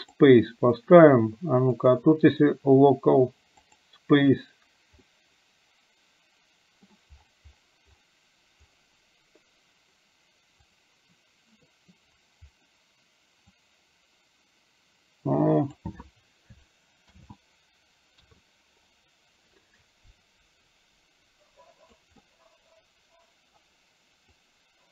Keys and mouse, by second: 1.9-3.9 drag, 5.1-6.9 middle drag, 13.8-15.9 drag, 17.3 ctrl+z, 18.3 KP_3, 19.8-22.0 drag, 22.3-23.5 middle drag, 24.4-24.9 drag.